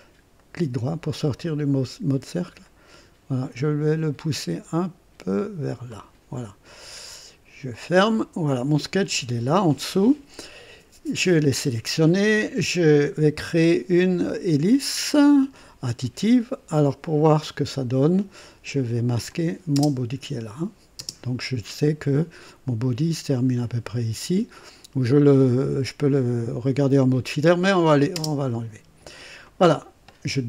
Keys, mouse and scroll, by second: 0.3 right click, 1.2 click, 2.4-5.9 drag, 7.6 click, 13.3 click, 18.3 click, 19.3 click, 19.7 space, 20.9 space, 28.1 space, 29.4 click.